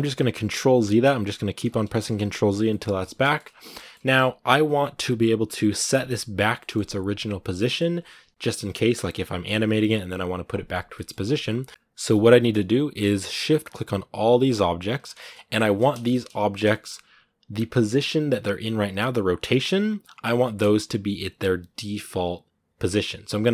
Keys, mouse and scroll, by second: 1.7 shift+middle click, 2.4 scroll down 1, 2.5 middle click, 2.8 a, 3.0 shift+middle click, 3.2 scroll up 2, 3.5 shift+middle click, 4.3-6.0 scroll down 1, 6.0-6.4 scroll down 1, 6.4-10.9 middle drag, 10.9-11.7 scroll up 2, 11.7 a, 12.2-13.2 shift+middle drag, 13.2-14.8 right drag, 14.8 scroll down 2, 14.9 shift+middle click, 15.3 shift+right click, 15.5 shift+middle click, 16.2 shift+right click, 16.5-19.0 shift+middle drag, 19.0-20.2 scroll up 1.